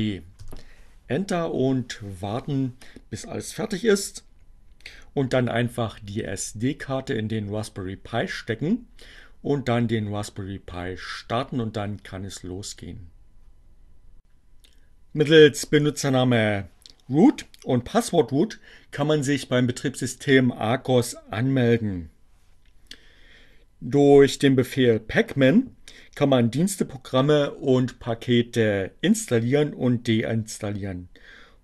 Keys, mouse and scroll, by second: 14.2 click.